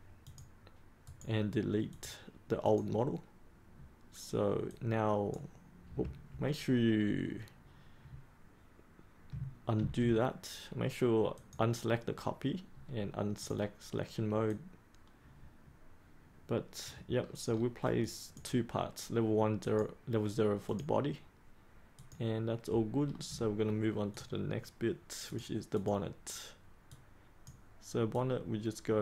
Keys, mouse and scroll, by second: 1.0 right click, 1.9-3.6 drag, 9.7 ctrl+z, 11.3-17.1 drag, 17.1-17.4 scroll up 1, 17.4-18.0 scroll down 1, 18.0 click, 23.0-23.5 scroll down 1, 24.1-29.0 drag.